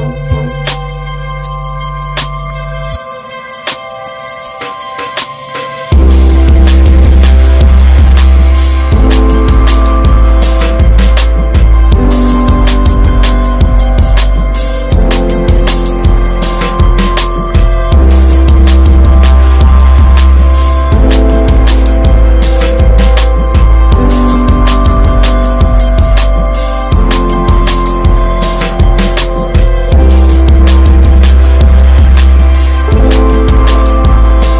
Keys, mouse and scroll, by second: 0.2 Tab, 0.7 Tab, 0.7 click, 3.1-4.6 drag, 4.6 ctrl+v, 6.3 click, 8.1-8.8 middle drag, 8.8-12.6 drag, 16.2 click, 17.7 scroll up 2, 18.0-22.0 drag, 22.0 scroll down 4, 22.2 middle drag, 22.4-22.8 scroll up 2, 22.8 middle click, 23.1 ctrl+s, 23.5 click, 23.6 Tab, 24.0 middle click, 24.1-24.4 scroll up 4, 24.4-28.4 shift+middle drag, 28.4-32.3 drag, 32.3 Tab, 32.5 click, 32.7-33.2 scroll down 1, 33.2-33.7 middle drag, 33.7 ctrl+s, 33.9 middle click, 34.0 scroll up 2.